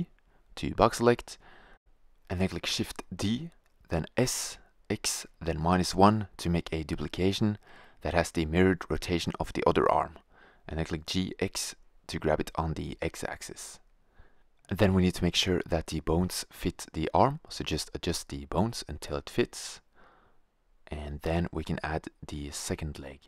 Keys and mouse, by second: 2.0 shift+d, 6.9 g, 12.4-14.3 drag, 14.8 right click, 15.5 g, 15.9 click, 16.4 g, 16.7 click, 17.0 g, 17.3 click, 18.1-19.1 drag, 19.7 KP_1, 20.1 middle click, 21.1-22.4 middle drag, 22.4 a.